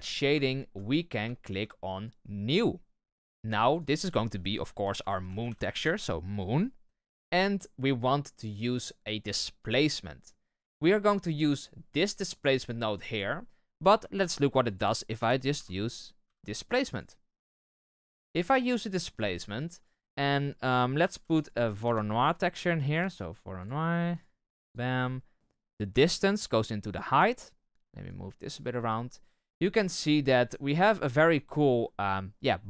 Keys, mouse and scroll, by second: 0.4-0.7 shift+middle drag, 0.7-1.2 scroll up 4, 1.2-2.5 shift+middle drag, 2.5-5.6 drag, 5.6 o, 11.0-13.1 drag, 18.5 click, 18.7-19.5 middle drag, 19.5-26.9 drag, 27.3-28.0 middle drag, 28.0-32.6 drag.